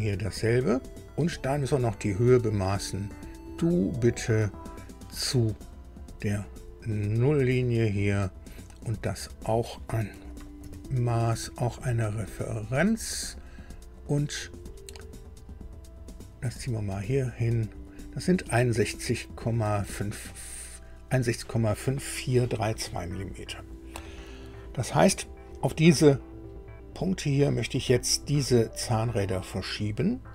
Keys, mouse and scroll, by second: 3.0 click, 7.5 click, 10.6 shift+d, 12.3 click, 14.0 click, 16.1-17.8 drag, 20.3 click.